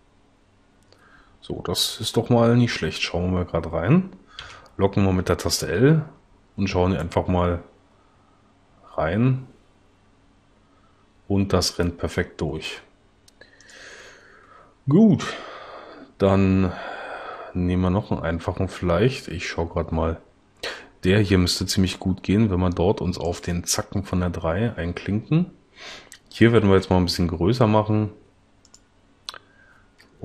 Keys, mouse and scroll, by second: 4.4 l, 13.7 click, 26.8 s.